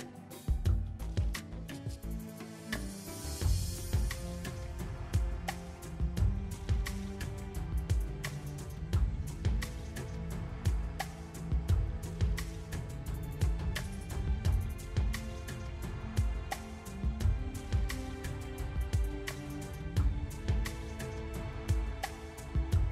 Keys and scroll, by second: 3.8 Tab, 7.1 Tab, 8.1 a, 9.1 shift+d, 19.8 KP_3, 20.7 r.